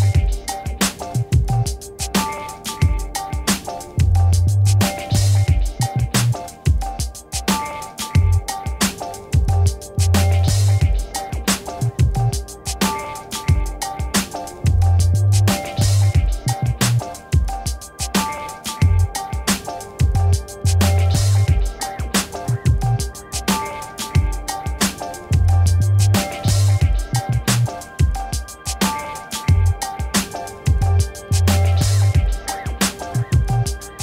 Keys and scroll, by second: 13.8 7, 17.4 space, 19.9 v, 23.2 ctrl++, 23.6 space, 25.9 ctrl+-.